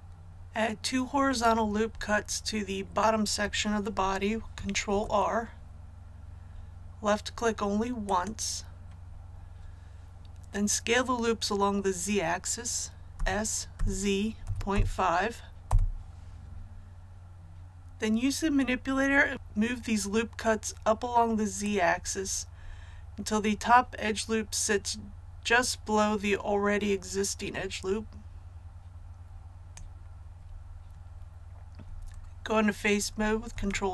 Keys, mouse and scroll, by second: 4.8 ctrl+r, 6.0-8.0 scroll up 1, 8.0 click, 13.1 s, 13.7 z, 14.4 KP_Decimal, 14.6 KP_5, 15.6 Return, 21.6-30.7 drag, 33.4 Tab.